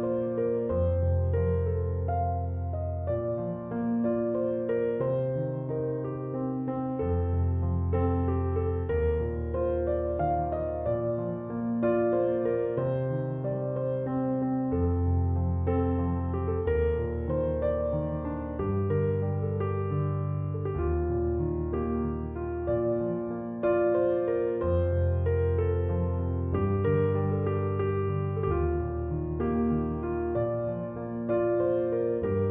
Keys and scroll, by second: 0.1 0, 0.2 Return, 8.0 3, 8.5 Return.